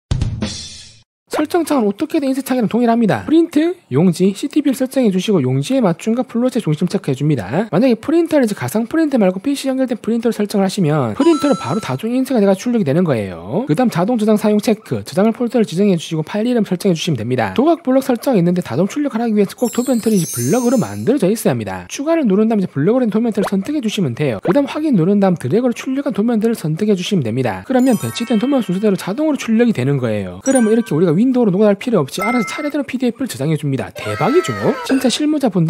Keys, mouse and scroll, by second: 2.4 click, 3.6 click, 5.1 click, 5.7 click, 7.0 click, 14.7 click, 15.7 click, 17.9 click, 22.5 click, 24.2 click, 25.8 click, 26.3 scroll down 1, 27.2 click, 27.7 click, 28.0 right click.